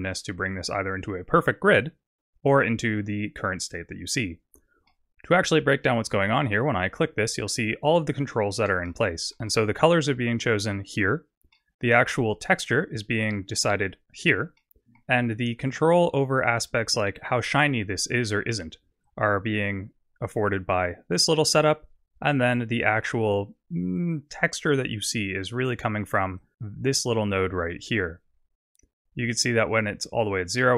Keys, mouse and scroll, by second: 4.9 middle click, 6.7 click, 7.2-8.3 scroll down 11, 8.8 shift+middle click, 11.6 middle click, 14.8 middle click, 17.1-17.6 scroll up 4, 17.9 scroll down 1, 19.1 click, 26.4 click.